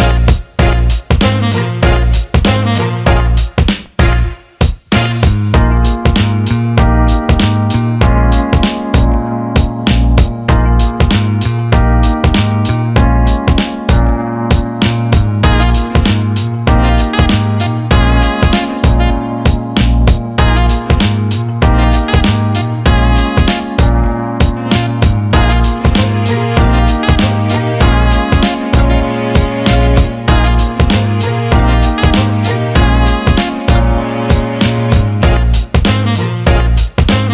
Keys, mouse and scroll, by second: 4.0 click, 4.9 shift+d, 6.9-8.5 drag, 8.9 alt+shift+middle click, 9.8-12.1 drag, 13.3-14.3 drag, 16.6 click, 17.8 click, 18.9 click, 20.3-21.6 shift+drag, 24.0 click, 25.0-26.0 shift+drag, 26.8-28.5 alt+middle drag, 30.4 alt+shift+middle drag, 32.0 ctrl+s, 35.2 alt+shift+middle click, 35.6-36.9 alt+middle drag.